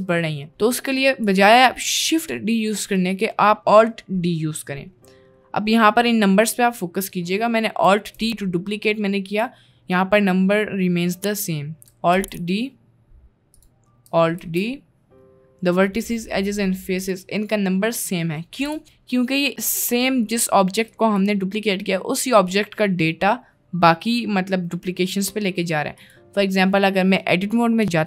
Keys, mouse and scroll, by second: 0.9 middle click, 4.7 middle click, 8.3 alt+d, 12.2 alt+d, 14.5 alt+d, 18.6 g, 19.7 middle click, 20.3 middle click, 21.0 click, 26.0 click, 27.9 Tab.